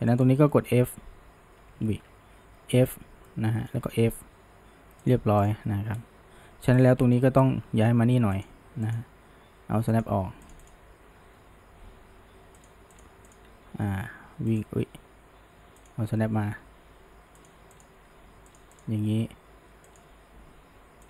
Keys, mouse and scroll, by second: 0.1 shift+click, 0.5-1.0 shift+middle drag, 1.0 f, 1.9 ctrl+z, 2.5 f, 3.3-3.9 middle drag, 3.9 f, 5.1 drag, 5.5 click, 5.9-6.8 scroll up 1, 6.8 click, 7.1-7.4 middle drag, 7.4 g, 8.9 click, 10.0 click, 11.3 g, 13.3 click, 13.5 g, 15.8 click, 16.5 g, 17.8 click, 18.0 g, 18.8 click, 18.9 g.